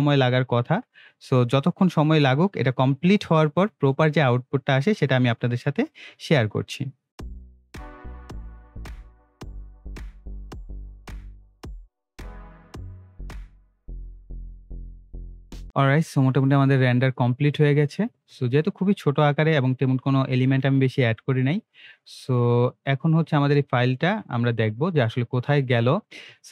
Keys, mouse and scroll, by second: 17.1-24.0 drag.